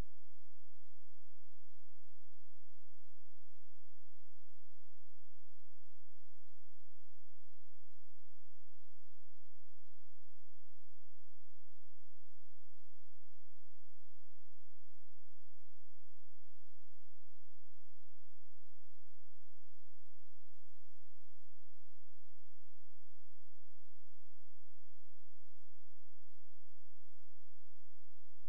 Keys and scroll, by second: 3.9 space, 8.8 F4, 13.3 F9, 18.2 Escape.